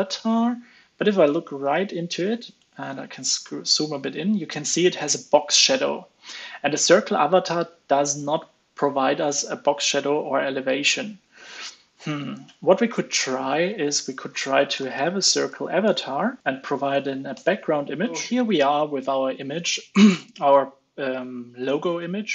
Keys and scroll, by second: 16.4 ctrl+space.